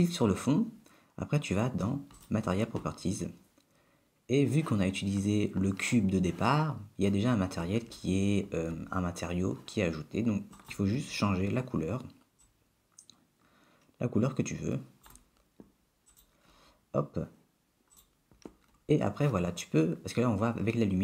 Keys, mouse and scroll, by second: 2.2 click, 10.6 click, 18.3 click.